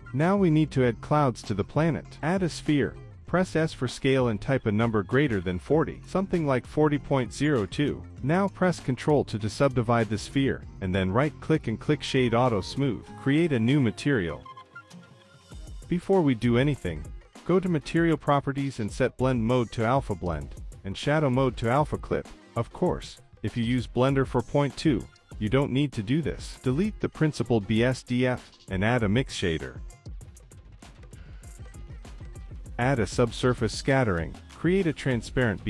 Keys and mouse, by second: 0.0 click, 1.0 shift+a, 2.4 shift+a, 4.0 s, 11.2 ctrl+2, 11.8-12.7 right drag, 13.4-13.9 drag, 14.3 click, 15.0-16.3 drag, 17.0 z, 18.8 middle click, 19.2 click, 20.2 click, 21.4-21.9 drag, 23.4-24.8 drag, 25.6 click, 26.3 click, 26.7 click, 27.0 click, 27.3 middle click, 27.6 click, 28.3 x, 29.3 middle click, 29.6 shift+a, 31.8 click, 31.9 middle click, 32.5 click, 33.0 shift+a, 35.1 shift+a.